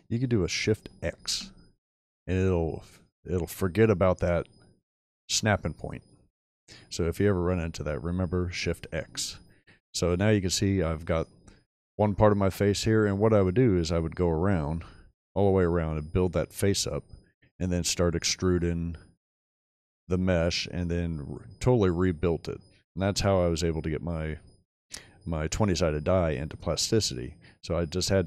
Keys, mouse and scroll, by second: 1.1 shift+x, 7.0-7.6 middle drag, 10.0-11.0 scroll down 3, 11.0-11.5 shift+middle drag, 19.1-20.5 middle drag, 21.8 middle click.